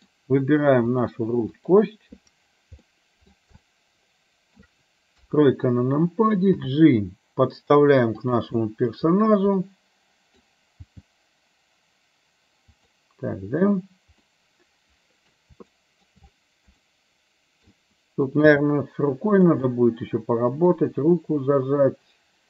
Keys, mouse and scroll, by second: 1.6 click, 3.0 middle click, 3.6 shift+middle click, 5.2 KP_3, 6.7 g, 9.7 middle click, 11.0 g, 14.4 scroll up 1, 14.6 middle click, 15.9 shift+middle click, 15.9 scroll up 1, 17.0 middle click, 17.7 scroll down 1, 18.6 g, 19.7 middle click, 21.3-22.4 middle drag.